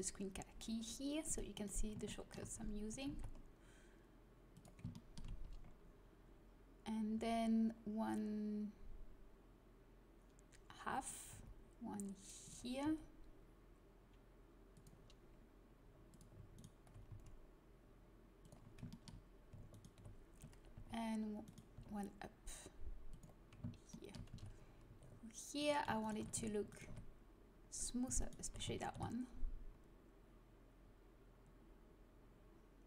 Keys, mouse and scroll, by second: 1.2-2.9 right drag, 2.0 middle click, 2.9 g, 7.1 e, 11.3 e, 12.8 s, 16.1 click, 16.5 right click, 17.0 s, 20.4 g, 21.7 e, 24.3 a, 25.5-27.5 drag, 27.5-28.8 right drag, 28.8 ctrl+b.